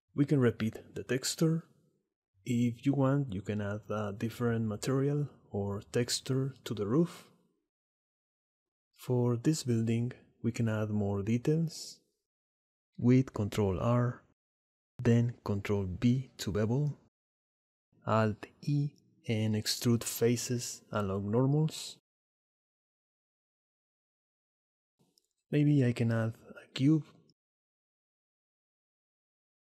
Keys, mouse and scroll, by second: 0.3-1.4 drag, 2.7 middle click, 2.9 Tab, 3.6-4.9 middle drag, 5.3 Tab, 6.1 shift+middle click, 6.2 shift+click, 8.7 Tab, 9.0 shift+click, 10.3 click, 10.6 Tab, 11.1 click, 13.0 ctrl+r, 16.0 ctrl+b, 19.2 alt+e, 22.5 ctrl+r, 23.3 ctrl+b, 23.9 alt+e, 24.6 shift+s, 26.1 shift+a.